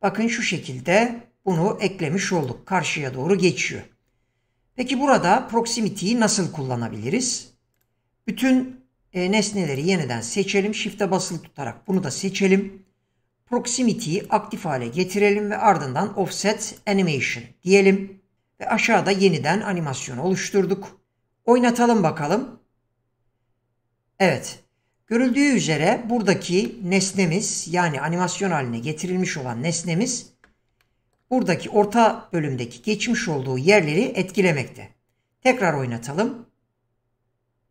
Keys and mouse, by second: 1.5 click, 2.4 click, 7.7 click, 9.2 q, 14.2 click, 25.4 click, 27.1 middle drag, 30.8-31.2 shift+middle drag, 34.4 click.